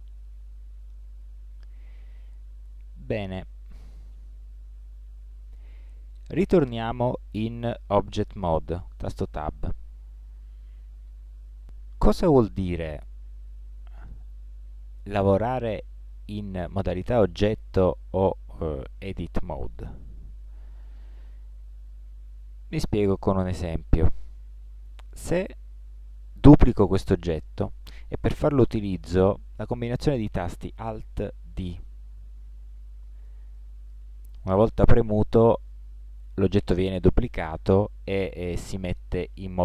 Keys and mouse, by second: 3.2 ctrl+Tab, 9.5 Tab, 10.2-20.2 middle drag, 23.0-25.4 middle drag, 31.5 alt+d.